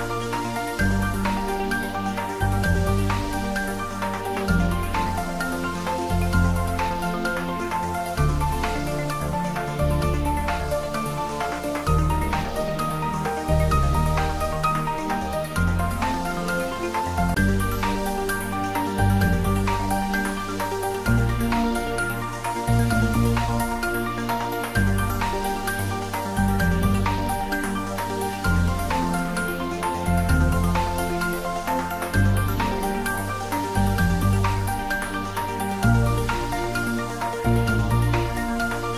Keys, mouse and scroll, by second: 0.1 right click, 0.3 click, 19.7-20.5 scroll down 1, 20.5-25.0 middle drag, 25.0 click, 27.4 click, 30.5-31.1 scroll down 1, 33.1 3, 35.5 click.